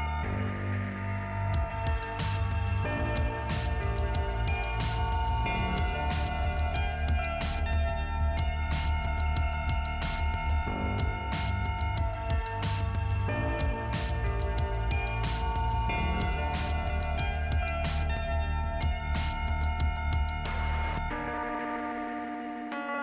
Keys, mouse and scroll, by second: 0.8 click, 3.7 click, 6.1 click, 6.3 click, 6.3 click, 6.4 double click, 6.6 double click, 6.8 double click, 6.8 double click, 7.0 double click, 7.2 double click, 7.9 double click, 8.3 double click, 8.5 double click, 9.3 scroll down 1, 10.0 p, 10.4-11.0 scroll down 2, 13.3-14.3 scroll up 2, 14.3 click, 15.1 click, 16.5 click, 19.3 click, 21.3 click.